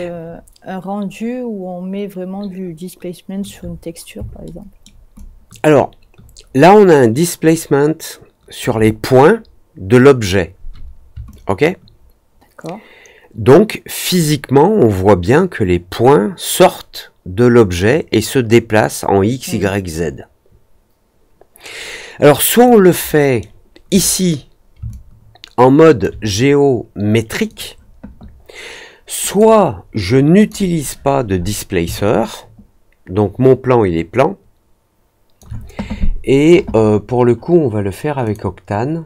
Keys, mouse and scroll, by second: 4.4 alt+middle click, 5.1-8.5 alt+drag, 11.2-22.6 alt+drag, 23.0 alt+middle click, 24.0 scroll down 1, 24.8-25.9 alt+drag, 29.2 click, 30.3 click, 32.0-35.3 alt+drag, 38.2 click.